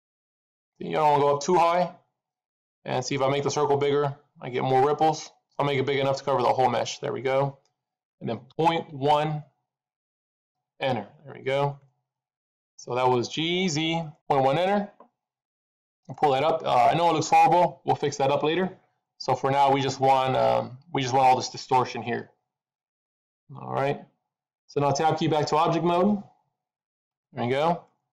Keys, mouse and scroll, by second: 11.6 middle click, 14.1 middle click, 19.1 middle click, 26.9 Tab, 27.8 middle click.